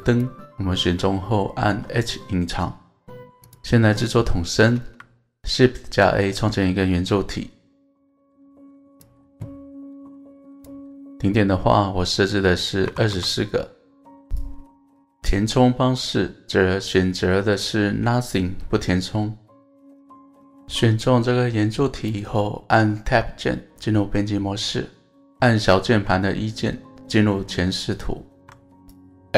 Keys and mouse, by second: 4.6 shift+a, 4.7 shift+a, 12.2-14.6 drag, 14.9-17.8 drag, 23.0 Tab, 25.9 KP_1.